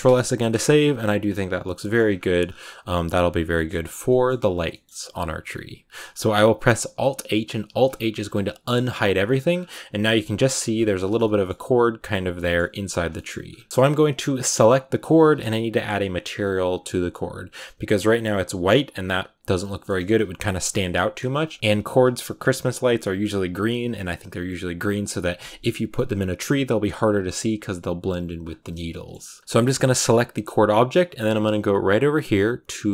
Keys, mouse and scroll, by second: 0.4 KP_0, 1.7 shift+middle click, 1.9-2.6 scroll up 9, 3.2-3.9 scroll down 8, 3.4 shift+middle click, 3.9-7.6 shift+middle drag, 7.6 alt+h, 8.4 a, 9.0-10.4 scroll up 9, 10.4 scroll down 4, 11.0 scroll down 1, 11.1-12.9 shift+middle drag, 12.9-13.6 scroll down 4, 13.0 shift+middle click, 13.6-14.0 scroll up 4, 14.8 right click, 18.9 scroll down 2, 19.5-29.1 shift+middle drag, 29.1 scroll up 1, 29.4 g, 30.5 middle click, 30.5 scroll down 3.